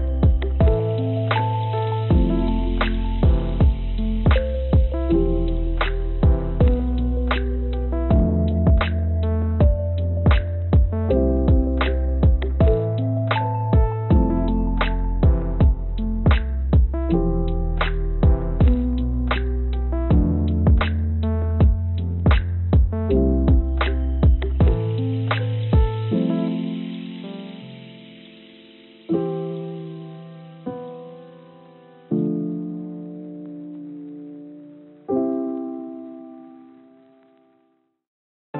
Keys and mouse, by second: 2.3 click, 2.4 click, 5.5-6.7 drag, 7.5 click, 8.8-12.5 drag, 13.9-15.1 drag, 16.8 click, 17.4 click, 19.5 shift+d, 24.3-26.5 drag, 27.1 click, 28.1 click, 32.0 click, 32.9 click, 37.0 click, 38.1 click.